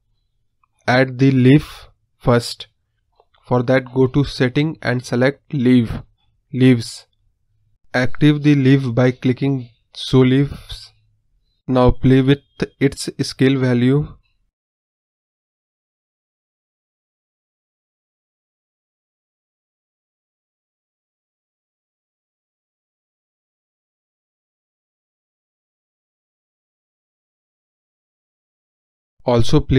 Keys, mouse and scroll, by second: 0.4-1.9 drag, 2.0 scroll down 1, 2.3-2.9 scroll up 1, 2.9-3.3 scroll down 3, 3.3-4.9 scroll up 3, 4.9-6.5 drag, 11.9 click, 16.9-19.8 drag, 19.8-26.1 drag, 26.1-26.6 scroll up 7, 26.6-26.9 middle drag, 26.9 scroll up 1, 27.1-28.4 middle drag, 28.4 KP_0, 29.1-29.7 scroll down 4.